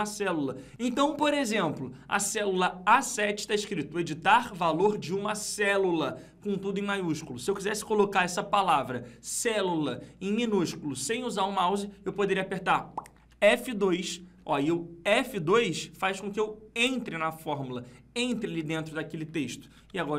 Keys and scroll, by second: 13.1 F2.